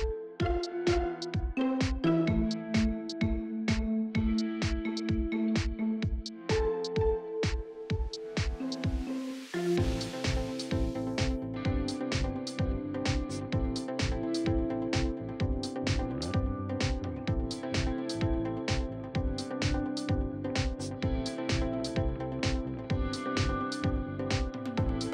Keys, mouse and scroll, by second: 1.1 scroll up 1, 1.5 right click, 2.5-2.9 scroll up 1, 2.9-4.5 right drag, 4.5 scroll down 1, 4.7 right click, 5.8 click, 7.2 scroll up 1, 7.8 right click, 8.6 shift+right click, 9.9 shift+right click, 11.3 shift+right click, 13.3 shift+right click, 14.1 shift+right click, 15.0 shift+right click, 16.0 Tab, 18.6 shift+right click, 19.6 scroll down 1, 20.1 right click, 21.7 shift+right click, 22.2 right click, 23.0-24.1 scroll up 1, 24.1 right click, 25.0 shift+right click.